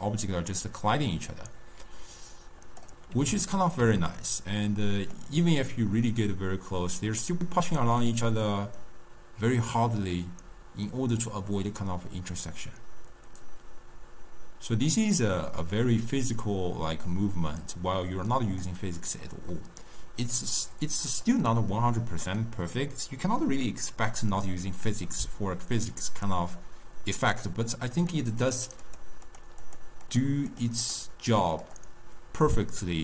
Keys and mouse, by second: 3.6-6.2 ctrl+middle drag, 6.2-9.3 drag, 19.3-21.4 middle drag, 21.4 click, 22.3 click, 25.8-28.0 middle drag, 28.0 click, 28.4 click, 28.9 click, 29.3 click, 29.7 click, 30.1 click, 30.6 click, 30.9 click, 31.3 click, 31.7 click.